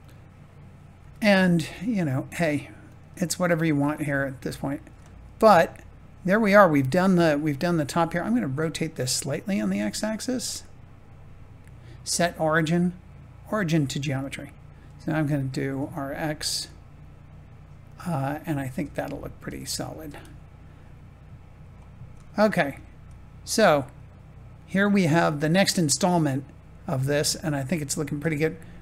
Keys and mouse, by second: 0.9 g, 2.8 click, 3.7 Tab, 5.4 middle click, 7.4 click, 7.8 middle click, 9.4 r, 9.7 x, 11.6 ctrl+z, 11.6-15.6 drag, 15.6 r, 15.8 x, 18.7 Tab, 19.6 click, 20.0 middle click, 22.2 shift+middle click, 26.0 middle click.